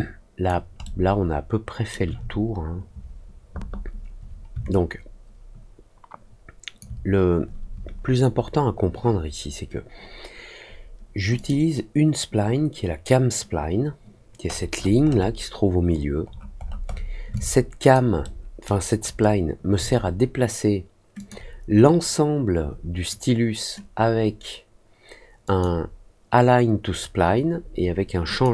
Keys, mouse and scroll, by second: 0.8-1.8 alt+middle drag, 4.6-6.7 alt+drag, 11.3 click, 14.4 middle click, 14.7 middle click, 15.0 scroll up 1, 16.2-16.7 scroll down 2, 16.8 scroll up 1, 17.3 alt+click, 18.2 alt+middle click, 18.9 alt+middle click, 21.1 click, 25.4 click, 28.2 click.